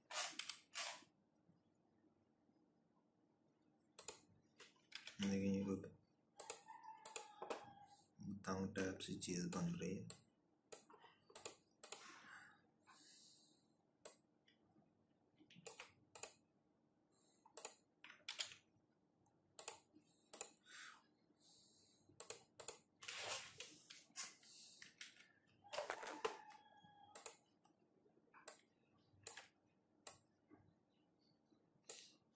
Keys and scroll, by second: 4.4 Up, 4.4 ctrl+-, 9.4 ctrl+-, 17.8 ctrl+-, 24.5 j.